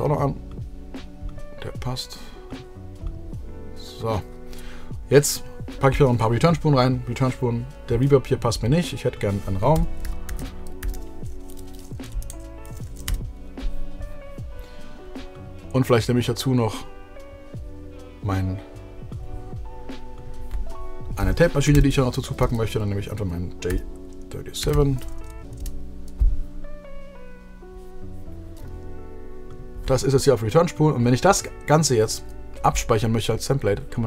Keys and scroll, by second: 9.9-11.8 typing, 12.3 Return, 12.5 Right, 13.1 Down, 13.3 Return, 22.6 super+f, 23.9 j, 24.9 7, 25.4 Return.